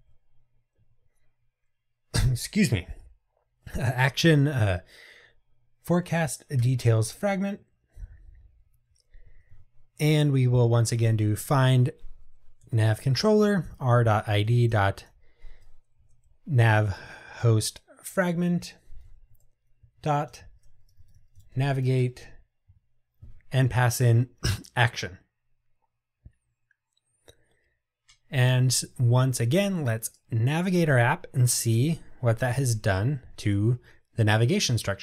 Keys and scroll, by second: 6.7 Return, 9.3 Tab, 12.9 Return, 17.7 Return, 22.8 Tab, 30.2 ctrl+r.